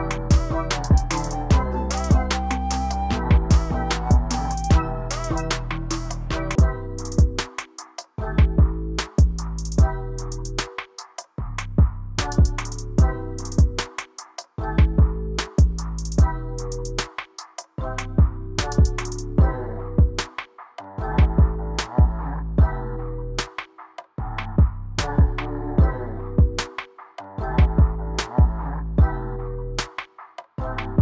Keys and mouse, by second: 0.3 click, 0.6 click, 1.0 shift+middle click, 2.3 click, 5.6 click, 6.8 middle click, 8.0-8.5 shift+middle drag, 10.1 click, 11.4 click, 13.4 shift+middle click, 14.7 click, 15.5 click, 18.5 s, 25.7 g, 28.7 click, 29.4-31.0 drag.